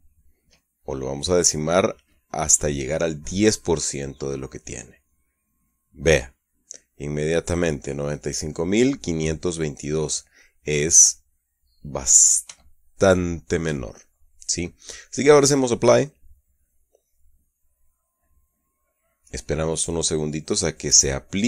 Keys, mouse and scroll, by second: 0.0 KP_Enter, 9.8-12.8 middle drag, 13.0-14.2 shift+drag, 16.8 click.